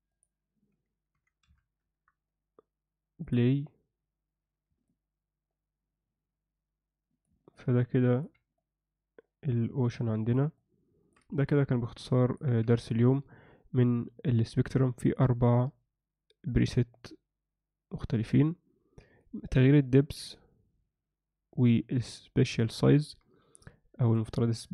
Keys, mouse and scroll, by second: 0.1-1.9 drag, 3.2 click, 4.9-7.3 alt+middle drag, 7.5 ctrl+alt+middle click, 8.5-10.3 alt+middle drag, 10.5 alt+shift+middle click, 11.5 ctrl+alt+middle click, 15.1-19.0 drag.